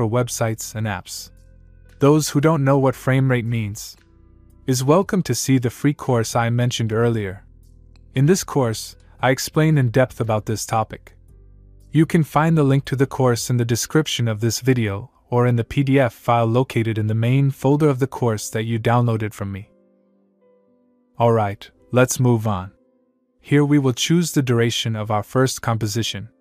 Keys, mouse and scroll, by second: 22.4 click.